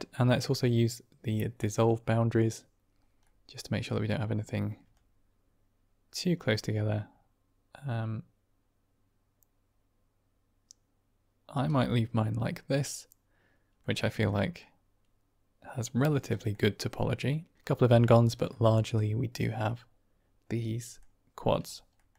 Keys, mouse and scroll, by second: 1.5 click, 3.1-3.7 middle drag, 4.9-11.5 shift+drag, 11.9-13.7 middle drag, 14.2 middle drag, 16.4-17.5 middle drag, 18.4 middle drag, 19.3-20.9 middle drag, 21.8 middle click.